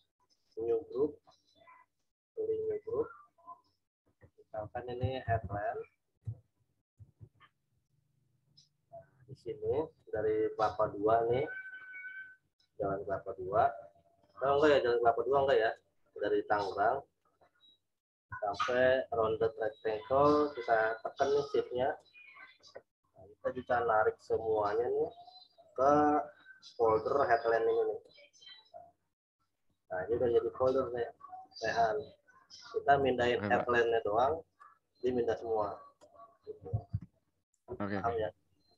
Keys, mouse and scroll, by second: 2.6 click, 5.0-5.9 typing, 12.0 click, 15.6 click, 21.8 shift+click, 34.6 click, 36.8 ctrl+z.